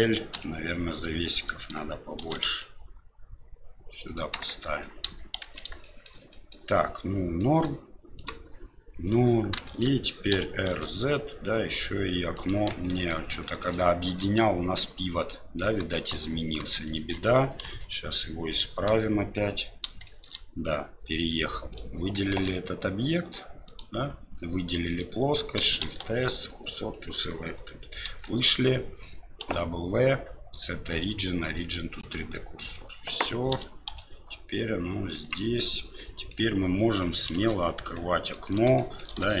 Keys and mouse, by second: 2.4 shift+d, 4.5 Tab, 4.8 middle drag, 5.4 shift+z, 5.8 shift+middle drag, 6.3 middle click, 7.4 middle drag, 8.1 right click, 9.6 shift+middle drag, 10.3 r, 12.8 shift+middle click, 13.4 shift+middle drag, 14.1-15.6 middle drag, 16.1-16.6 middle drag, 16.8 shift+right click, 17.6 KP_Divide, 18.9 KP_7, 20.0 shift+middle drag, 21.7 right click, 22.3 Tab, 23.6 right click, 24.7 3, 24.9 right click, 25.8 shift+s, 28.1 Tab, 29.4 w, 33.5 r, 35.9-36.3 middle drag, 37.0 middle drag, 37.4 KP_Divide, 37.9-38.3 middle drag, 38.7 shift+middle drag, 39.2 shift+middle drag.